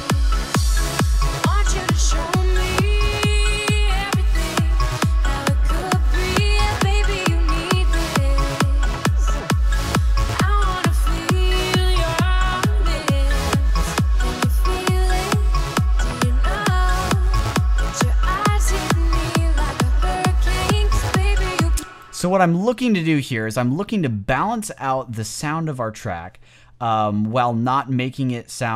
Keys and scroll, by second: 21.6 space.